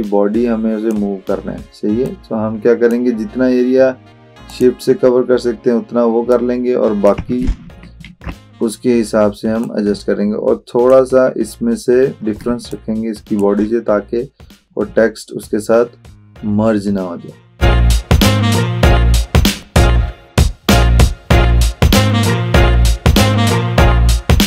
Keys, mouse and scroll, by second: 8.1 ctrl+z, 9.7-10.9 drag, 12.5 space, 12.8 click, 13.0-13.7 space, 17.7-18.6 drag, 19.0 z, 19.6 ctrl+alt+z, 20.1 click, 20.5 ctrl+z, 21.1-22.0 drag, 22.3-22.7 alt+click, 22.7 space, 23.0-23.5 drag, 24.2 space, 24.3 click, 24.3 space.